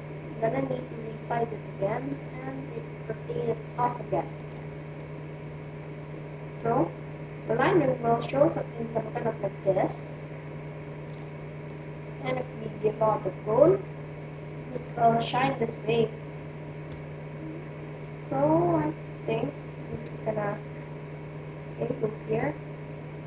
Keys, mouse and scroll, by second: 2.0 r, 4.9-6.8 middle drag, 8.8-11.2 middle drag, 11.2-12.3 drag, 12.6 click, 13.4 middle click, 16.7 KP_7, 19.9 KP_1, 20.9-23.1 middle drag, 23.1 r.